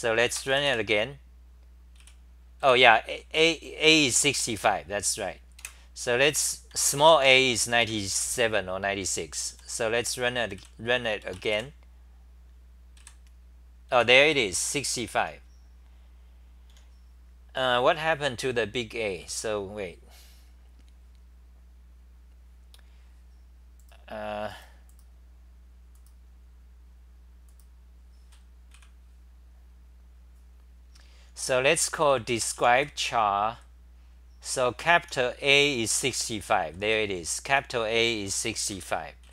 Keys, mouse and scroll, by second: 2.0 w, 2.6 d, 3.3 n, 5.6 super+w, 6.7 l, 7.0 u, 7.8 Home, 9.5 r, 10.5 w, 13.0-15.2 typing, 15.6 Delete, 19.2 w, 23.4 typing, 23.9 super+[, 23.9 click, 24.5 super+], 25.6-26.4 typing, 28.7 c, 31.8 c, 31.9 c, 32.1 c, 34.2-37.4 typing, 38.7 ctrl+g, 39.0-39.3 typing.